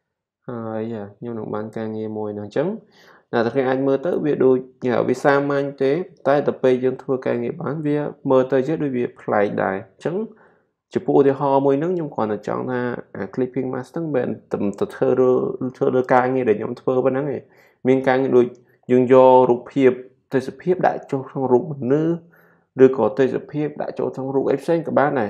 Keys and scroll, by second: 1.9 typing.